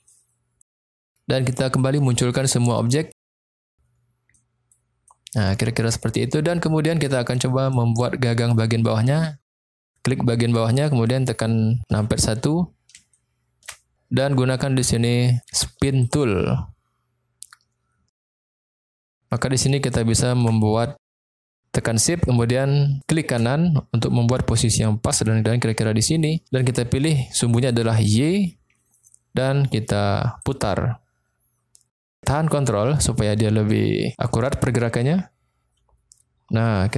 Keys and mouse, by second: 0.0 middle click, 0.7 shift+middle click, 2.6 click, 4.3 middle click, 5.0 middle click, 6.5 middle click, 7.3 middle click, 9.6 click, 11.9 KP_1, 13.2 shift+middle click, 16.1 click, 19.9 shift+middle click, 23.0 shift+click, 28.0 click, 30.4-36.9 drag.